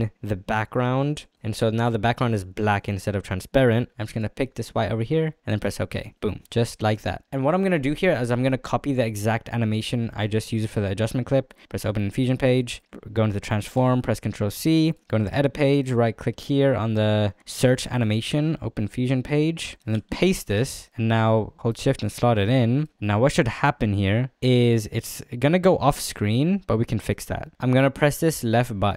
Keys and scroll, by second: 0.0 c, 14.2 ctrl+c, 20.2 ctrl+v.